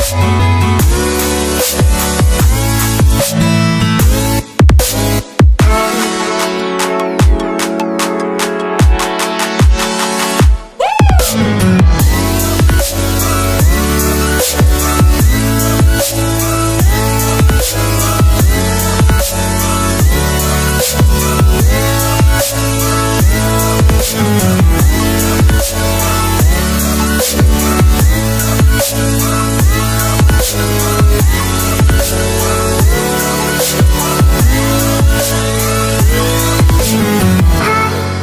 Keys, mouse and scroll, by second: 0.5 click, 0.6 right click, 1.6 click, 1.7 right click, 3.1 click, 4.0 shift+click, 6.5 Left, 8.5 shift+click, 9.8 Return, 10.8 Right, 11.0 ctrl+0, 11.5 click, 12.1-12.4 scroll down 1, 13.9 scroll up 1, 14.0 click, 15.9 scroll down 1, 18.4 click, 20.0 scroll down 1, 21.8 click, 31.5 click, 34.7 click, 37.0 click.